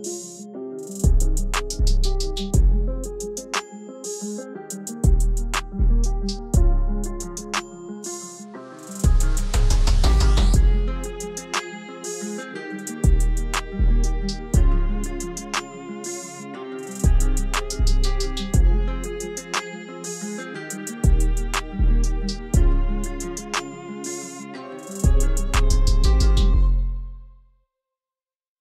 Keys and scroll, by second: 5.0-6.2 typing, 9.6 Delete, 24.9 1, 25.7 0.